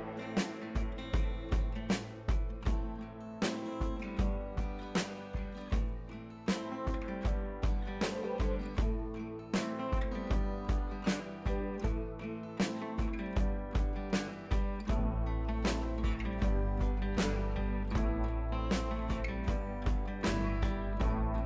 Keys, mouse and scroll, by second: 1.0 ctrl+z, 1.8 click, 3.1 scroll down 1, 3.5 scroll up 1, 4.9-8.4 drag, 8.6 scroll down 1, 9.0 scroll up 1, 9.8-14.0 drag, 15.5 scroll down 1, 16.1 scroll up 1, 17.4-21.4 drag, 17.9 typing.